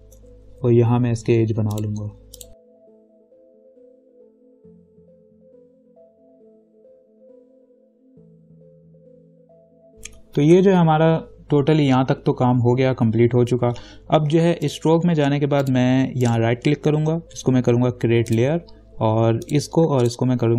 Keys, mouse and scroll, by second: 2.0 click, 2.5 click, 2.5 ctrl+click, 2.8 alt+click, 2.9 ctrl+click, 3.9 ctrl+click, 4.8 right click, 4.9 click, 5.6 right click, 5.9 ctrl+-, 6.0 space, 6.1 click, 6.1 space, 6.6 ctrl+=, 6.7 click, 7.9 alt+click, 8.1-9.2 ctrl+drag, 9.3 right click, 9.4 click, 9.6 right click, 9.7 click, 9.8 ctrl+-, 9.9 ctrl+0, 10.8 v, 14.9 right click, 15.8 click, 16.5 right click, 18.5 click, 20.3 ctrl+click.